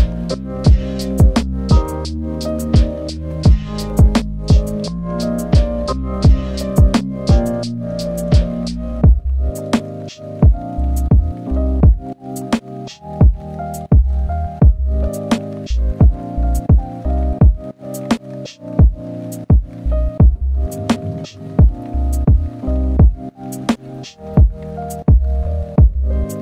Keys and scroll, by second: 1.5 ctrl+z, 1.7 ctrl+z, 1.9 ctrl+z, 3.8 ctrl+z, 4.1 ctrl+z, 4.7 ctrl+z, 5.5 ctrl+z, 6.1 ctrl+z, 9.5 ctrl+z, 9.7 ctrl+z, 10.8 ctrl+z.